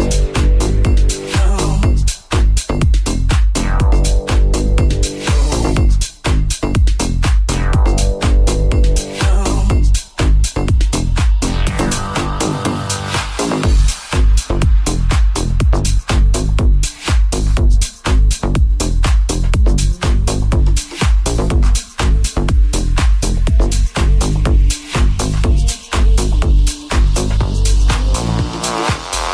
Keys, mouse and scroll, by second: 5.5 click, 5.6 shift+click, 6.5-9.1 shift+drag, 9.3-24.4 ctrl+drag, 11.2 ctrl+Tab, 11.9 /, 12.8 right click, 18.4 ctrl+s, 24.5-29.3 drag, 25.8-29.3 shift+middle drag, 27.1 right click.